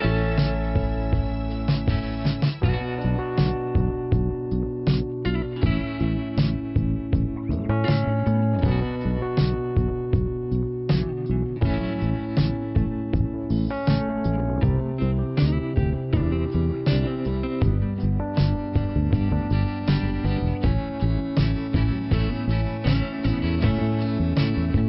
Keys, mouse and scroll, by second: 1.3 click, 1.9 click, 3.7 click, 5.0 click, 5.2 scroll up 1, 6.3 click, 8.1 click, 8.7 click, 9.5 click, 10.6 click, 12.8 click, 12.9 click, 14.5 click, 15.9 click, 16.6 click, 18.8 click, 20.4 click, 21.3 click.